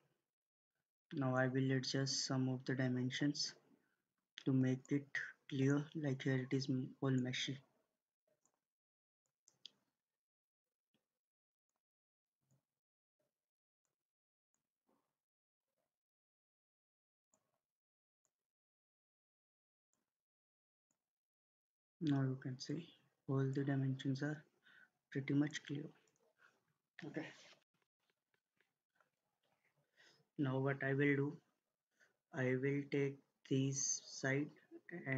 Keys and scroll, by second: 0.3 Escape.